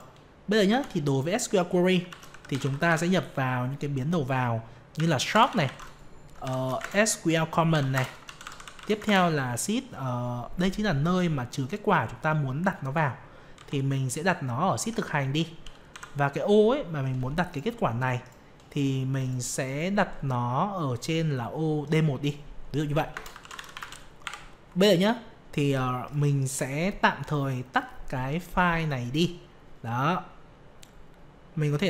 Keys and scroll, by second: 6.8 ctrl+space.